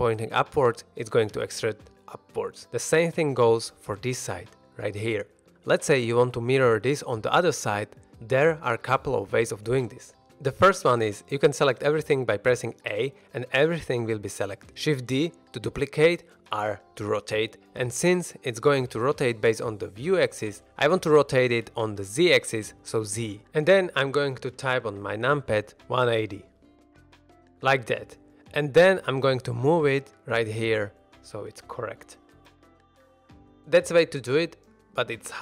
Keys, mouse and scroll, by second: 1.2 click, 1.7 shift+middle drag, 2.1 scroll down 1, 2.3 middle drag, 2.6 shift+middle drag, 2.9 click, 3.3 e, 4.5 click, 4.8-5.5 middle drag, 5.5 alt+a, 7.9 middle click, 10.5 middle drag, 11.5 a, 14.3 middle drag, 15.5 shift+d, 16.5 right click, 17.3 r, 23.1 z, 26.7 KP_1, 27.1 KP_8, 27.1 KP_0, 27.4 KP_Enter, 28.0 middle click, 28.9-30.2 typing, 31.5 shift+click, 31.7 shift+middle drag, 31.9-32.4 scroll up 2, 32.2 g, 32.4 x, 33.5 shift+drag, 33.8 shift+middle drag, 34.0-34.5 scroll down 2, 34.5 middle drag.